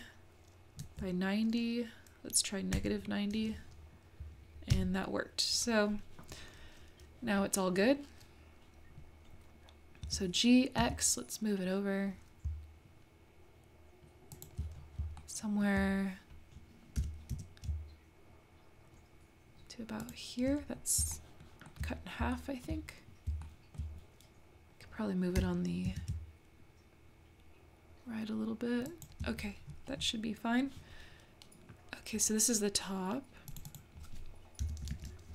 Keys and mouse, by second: 10.0 g, 15.2 shift+middle click, 17.0 g, 21.2 shift+middle click, 21.7 shift+middle click, 22.3 shift+middle click, 22.5 shift+click, 22.5 shift+right click, 22.6 shift+middle click, 23.4 shift+middle click, 23.5 shift+click, 23.6 shift+middle click, 23.8 shift+middle click, 25.4 g, 33.5 click, 33.7-35.3 drag.